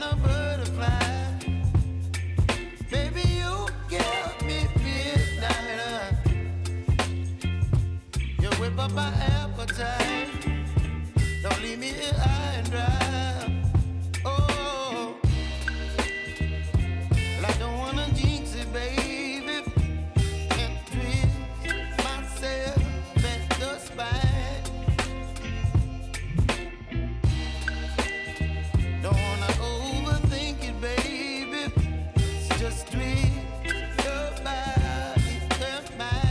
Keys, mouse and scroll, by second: 0.4 r, 1.0 click, 1.4-3.7 typing, 1.8 click, 5.7-7.1 drag, 7.1 typing, 7.7 click, 9.3-15.0 drag, 15.4 Return, 16.3 k, 16.9 click, 17.6 ctrl+c, 18.0 click, 18.4 ctrl+v, 21.0-24.7 drag, 24.7 F9, 25.3 click, 25.7-26.5 typing, 29.5 space, 31.0 j, 33.9 click, 35.5 -.